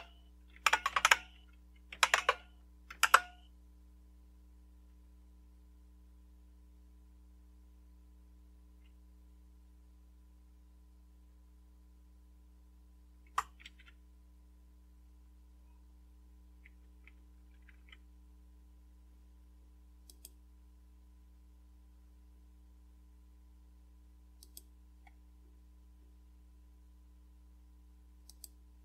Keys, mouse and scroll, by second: 0.0-3.7 typing, 2.9 Return, 13.6 ctrl+c, 14.9 click, 17.6 super+3, 20.1 click, 24.4 click, 25.4 scroll down 3, 26.4 scroll down 2, 28.3 click.